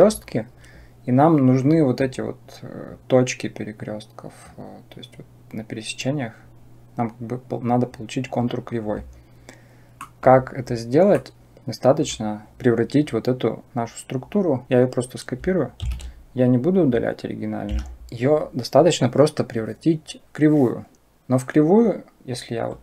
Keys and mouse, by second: 9.8 middle click, 11.1 middle click, 11.9 click, 15.7 shift+d, 21.6-22.8 drag.